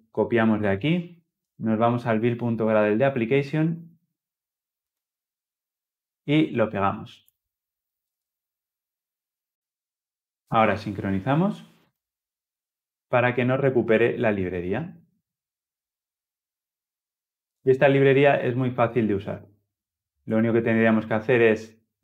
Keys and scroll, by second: 7.8 ctrl+v.